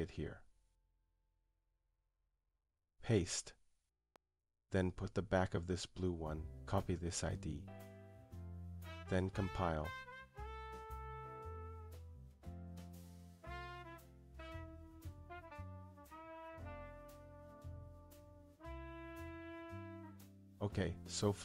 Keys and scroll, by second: 6.7 Return.